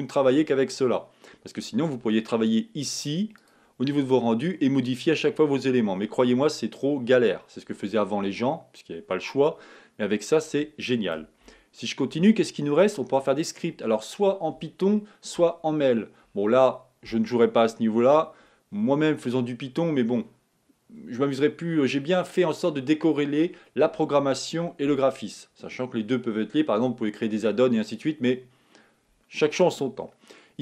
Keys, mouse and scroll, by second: 5.9 click.